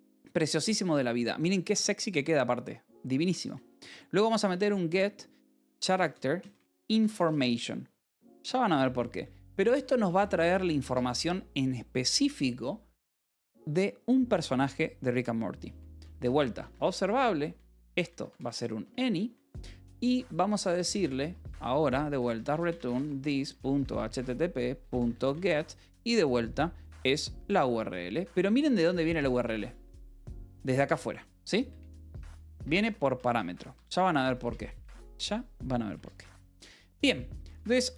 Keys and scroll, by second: 1.3 k, 2.9-11.3 typing, 13.3 space, 15.6-19.2 typing, 20.5 space, 20.9 Return, 21.8-25.7 typing, 27.3-30.4 typing, 27.9 Escape, 31.7-37.8 typing, 32.5 Escape.